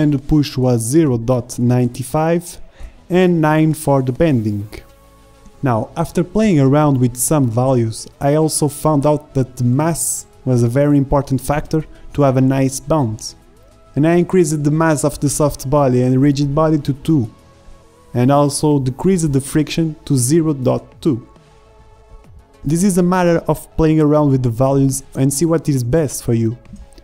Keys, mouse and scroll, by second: 3.4 alt+a, 3.4 shift+Left, 5.4-14.0 drag, 14.0 KP_2, 14.3 KP_Enter, 18.7-20.0 drag, 20.0 shift+Left, 20.3 alt+a.